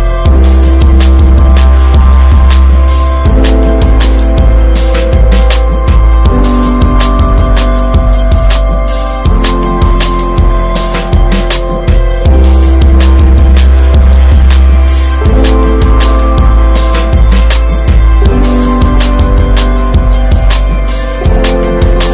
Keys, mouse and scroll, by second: 1.8 ctrl+s, 1.8-2.3 middle drag, 2.3 scroll up 1, 2.5 ctrl+s, 2.9 click, 3.2 scroll up 2, 3.6 Tab, 3.9 click, 4.3 Tab, 4.7 click, 5.8 2, 5.9 click, 6.6 alt+shift+click, 6.9 middle click, 7.5 shift+d, 8.9 p, 10.4 Tab, 10.5 drag, 10.9 ctrl+s, 11.4 click, 12.0 click, 13.0 ctrl+s, 13.4-16.1 drag, 16.6 click, 17.6 click, 18.2 ctrl+s, 18.5-18.9 drag, 18.9 shift+middle drag, 19.1 scroll up 1, 19.4 ctrl+s, 19.6 drag, 19.9 alt+middle click, 20.8 shift+d, 21.8 click.